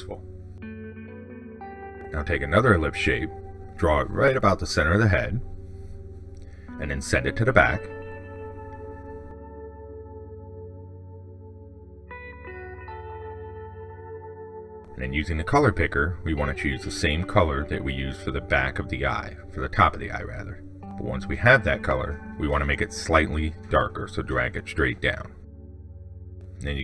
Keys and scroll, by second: 7.9 ctrl+shift+Down.